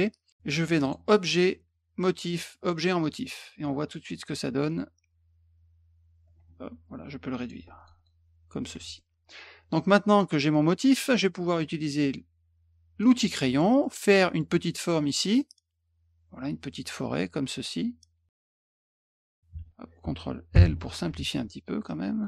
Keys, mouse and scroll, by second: 0.8 click, 3.0 click, 4.7 click, 6.2-7.5 ctrl+drag, 7.8 click, 7.9 click, 8.7 F1, 8.9 middle click, 10.1 click, 10.5-11.0 drag, 13.0 click, 13.4 middle click, 13.8 middle click, 14.1 middle click, 15.4-18.3 drag, 19.0 click, 20.5 ctrl+l, 21.0 F1, 21.8-22.2 drag.